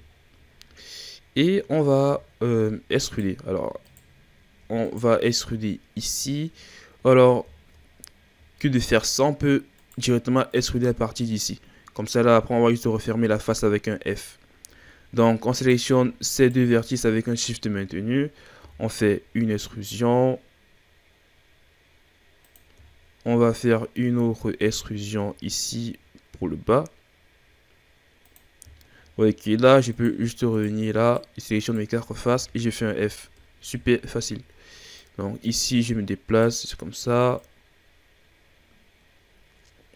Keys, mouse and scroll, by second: 1.1-2.2 scroll up 2, 2.5-3.0 shift+scroll up 3, 3.0 right click, 3.8 shift+right drag, 4.8 right drag, 6.0 shift+right click, 6.6-7.8 scroll down 9, 7.8-8.8 scroll up 1, 8.8-9.8 ctrl+scroll down 1, 9.8 right click, 10.4 right click, 11.1-13.1 shift+scroll up 2, 13.6-14.5 scroll up 1, 14.5-15.5 scroll up 2, 15.5 right click, 16.3 shift+right click, 18.5 e, 22.8-23.8 shift+scroll down 13, 24.5 e, 28.7 shift+scroll down 2, 28.9-29.4 shift+scroll up 7, 29.8 right click, 30.5 shift+right click, 31.0 shift+right click, 31.6 shift+right click, 32.3 f, 32.7-33.8 scroll down 6, 33.8-34.2 shift+scroll down 6, 34.2 scroll up 3, 34.9 right click, 37.4 right click.